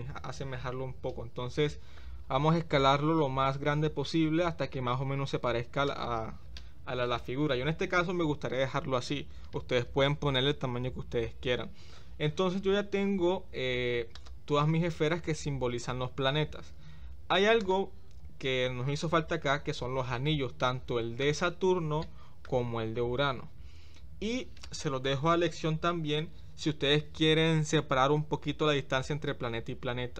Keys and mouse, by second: 2.6 s, 14.1 click, 17.6 click, 20.7 shift+middle click, 22.1-22.4 shift+middle drag.